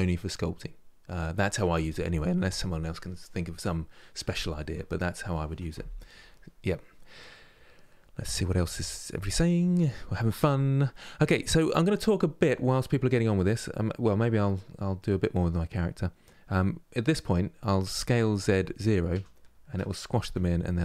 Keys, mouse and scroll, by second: 12.2 scroll down 2, 12.9 middle click, 13.5 scroll up 2, 14.1-17.1 middle drag.